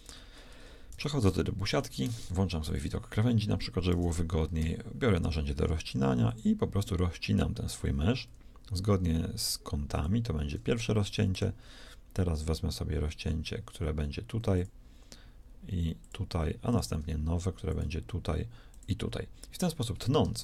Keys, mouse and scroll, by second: 0.5 Tab, 0.8 z, 2.0 ctrl+shift+Tab, 4.5 k.